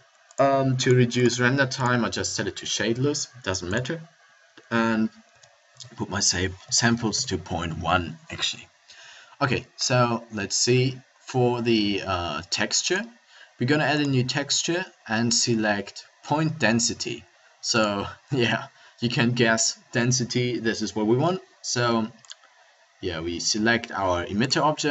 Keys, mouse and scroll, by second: 9.8-17.0 drag.